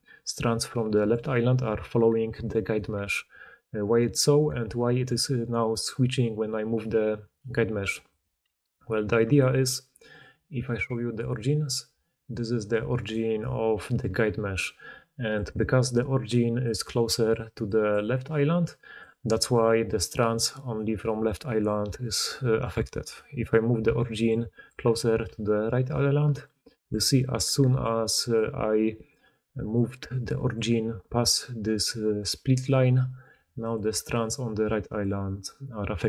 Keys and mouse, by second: 1.4-2.7 middle drag, 1.4-2.7 right drag, 2.2 d, 2.9 g, 8.2-10.0 middle drag, 8.4 g, 10.0-14.2 drag, 11.8 d, 12.2-13.4 d, 13.8 g, 15.4-16.0 middle drag, 15.9-21.0 d, 16.0-18.9 drag, 16.5-18.9 middle drag, 16.5-18.9 right drag, 23.8-25.2 typing, 26.4-29.1 drag, 26.8-35.2 typing, 29.0 middle click, 29.0 right click, 31.2-33.6 drag.